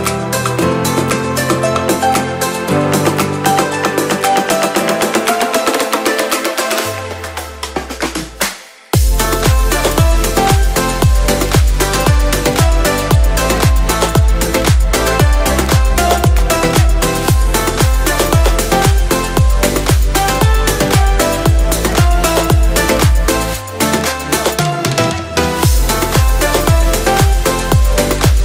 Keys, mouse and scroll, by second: 0.8 click, 1.3-1.7 scroll up 1, 2.1 click, 2.3 middle click, 3.4 click, 4.5-8.5 middle drag, 9.1 click, 10.1 g, 11.0 click, 11.4 middle click, 12.4 click, 12.6 g, 13.5 click, 14.0 click, 14.3 g, 14.4 g, 15.3 click, 15.6 middle click, 16.7 click, 16.9 g, 17.6 click, 18.3 middle click, 19.3 click, 19.5 g, 20.1 click, 21.4 click, 21.8-24.5 middle drag, 25.2 KP_1, 26.0 shift+middle click, 27.1 scroll down 1, 27.5 Tab, 27.8 click, 28.2 scroll down 1.